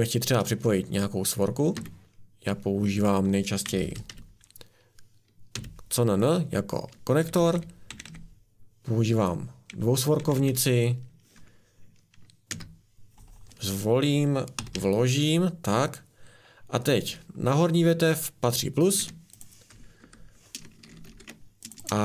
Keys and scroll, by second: 1.7 a, 3.4-5.5 typing, 7.1 Down, 7.3 Down, 7.5 Down, 7.8 Down, 8.0 Down, 10.1 Down, 10.3 Down, 12.4 Return, 14.5 r, 14.7 r, 18.9 Escape, 20.0 Delete, 21.0 ctrl+z.